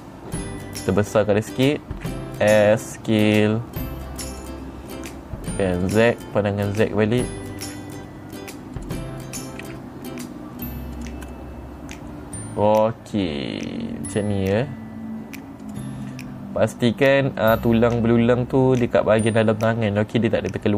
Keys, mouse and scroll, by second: 4.7 click, 6.3 click, 8.1 g, 9.3 click, 10.1 s, 11.4 click, 11.8-15.0 middle drag, 16.1 click, 16.5-20.7 middle drag.